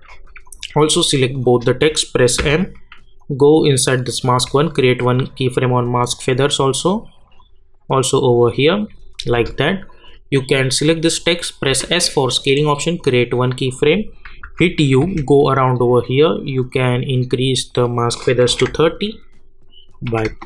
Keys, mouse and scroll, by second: 0.4 click, 1.4 shift+click, 2.4 m, 3.2 click, 10.1 shift+click, 11.6 s, 13.0 click, 14.4-15.5 typing, 15.9 click.